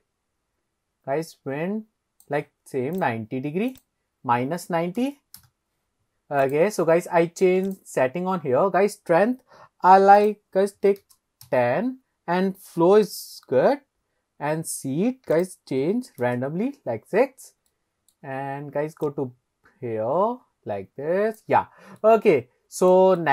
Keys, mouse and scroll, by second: 0.0 click, 3.0 click, 3.7-5.7 drag, 6.4 click, 7.7 click, 10.2-11.6 drag, 15.4-16.4 drag, 17.7-18.2 middle drag, 19.1 click, 21.6 click, 22.0-23.0 middle drag, 23.2 shift+middle drag.